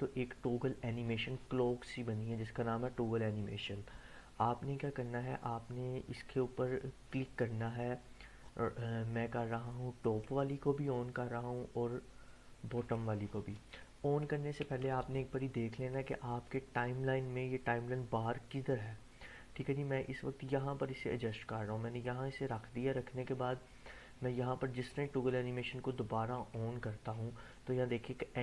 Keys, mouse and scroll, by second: 5.2-6.2 drag, 10.0 click, 12.8 click, 14.7 Delete, 15.9-21.2 drag.